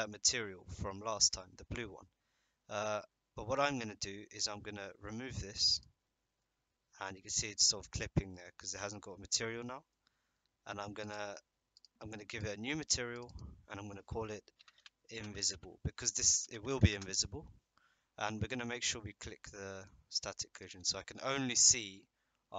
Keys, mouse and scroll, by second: 5.7 click, 8.4-9.0 middle drag, 9.6 middle click, 11.1 click, 12.4 click, 13.1 click, 13.2-17.6 drag, 20.5 click, 21.2 shift+middle drag.